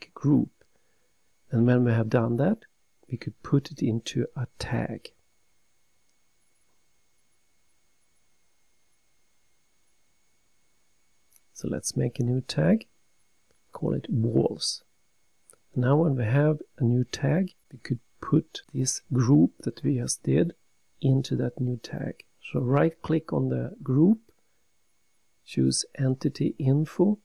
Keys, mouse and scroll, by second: 0.5 right click, 4.3 click, 12.9 click, 15.0 click, 16.3 click, 16.5 click, 16.6 double click, 17.4-19.3 typing, 21.1 typing, 22.5 Return, 26.6 right click.